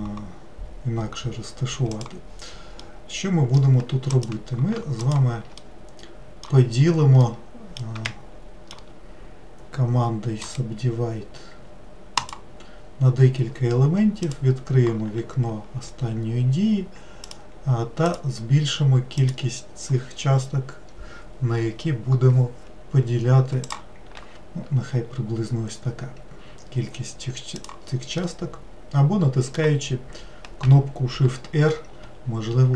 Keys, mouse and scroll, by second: 2.8-4.1 middle drag, 4.1 click, 5.0 shift+click, 5.6-10.4 middle drag, 10.4-13.5 right drag, 14.3-22.3 drag, 23.7-26.7 drag, 27.5 click, 28.2-31.3 middle drag, 31.7 shift+r.